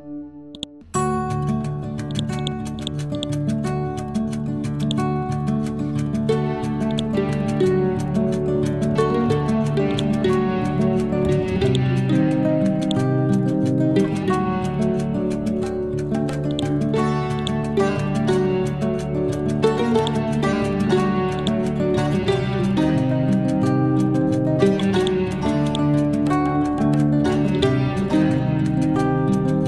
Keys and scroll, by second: 4.5 Delete, 6.0 ctrl+g, 7.8 9, 8.0 0, 8.2 Return.